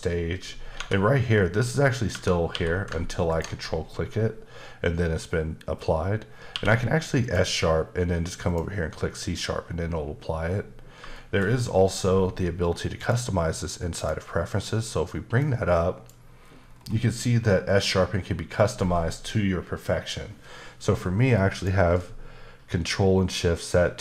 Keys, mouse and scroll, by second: 0.7 Tab, 2.1 Tab, 2.5 q, 3.3 ctrl+click, 6.5 q, 7.2 click, 8.5 click, 11.1 shift+middle click, 13.0 click, 13.9 click, 15.4 click, 16.5-17.5 scroll down 4, 21.5 click.